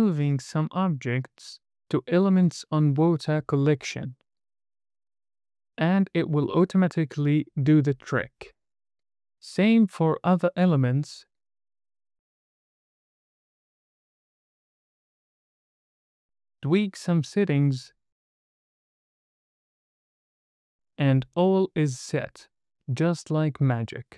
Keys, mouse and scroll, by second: 0.0 click, 9.2 scroll up 1, 9.6 click, 9.8 m, 10.6 scroll up 1, 10.8 drag, 11.1 click, 11.4 m, 12.3 scroll down 1, 13.0 click, 13.9 scroll down 1, 14.1 scroll up 1, 14.3 m, 15.1 click, 15.4 m, 16.4 click, 17.5-17.9 scroll up 2, 17.9 middle click, 18.4-20.1 drag, 21.1 click, 22.1-22.5 scroll up 1, 22.9-23.7 scroll up 2, 24.0 middle drag.